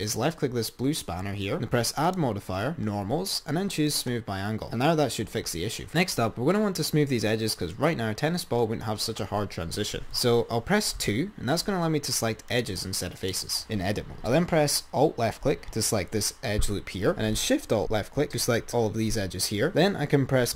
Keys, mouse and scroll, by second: 2.2-2.8 drag, 4.4 click, 4.6-5.7 scroll down 3, 5.9-6.7 scroll up 4, 10.0 Tab, 11.3 2, 12.7 click, 13.3 click, 15.8 alt+click, 18.4 ctrl+z, 19.6 alt+shift+click.